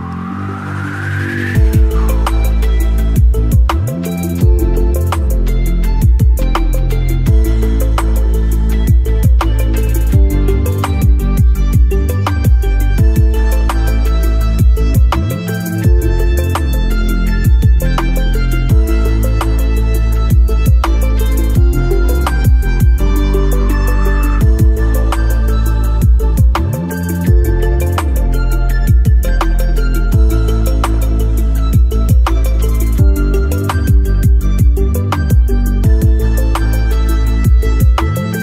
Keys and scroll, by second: 22.7 Delete, 25.3 Delete, 28.4 Delete.